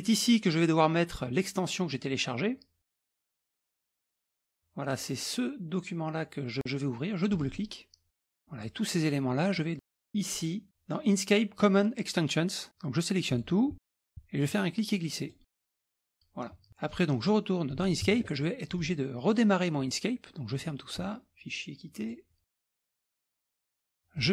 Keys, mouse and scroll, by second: 3.7 click, 7.3 click, 8.4 click, 9.9 click, 13.3 click, 13.9 shift+click, 14.5 click, 17.7 alt+click, 18.8 click, 19.2 click, 20.5 click, 22.0 click, 22.6 click, 23.2 click, 24.2 click.